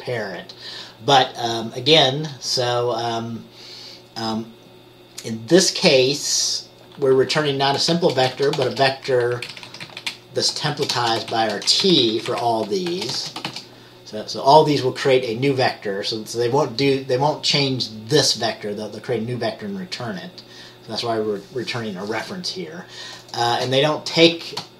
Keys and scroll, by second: 8.1-8.8 typing, 9.5 Down, 9.8 Left, 10.0 Left, 10.8-11.4 typing, 11.9 Down, 12.1 Left, 12.2 Left, 13.0-14.1 typing.